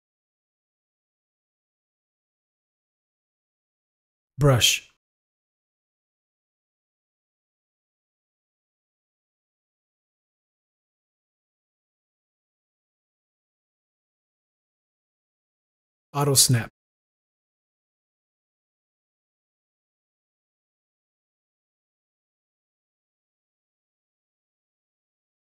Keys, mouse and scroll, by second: 5.6 u, 6.8 right click, 8.1 shift+click, 8.9 click, 10.4 click, 11.4 ctrl+z, 13.9 z, 13.9 click, 15.3 click, 17.1 click, 18.5 click, 18.7 right click, 18.9 click, 19.3 click, 19.8 click, 20.2 click, 20.9 click, 21.8 click, 22.9 click, 23.6 click, 24.3 right click, 24.6 shift+click.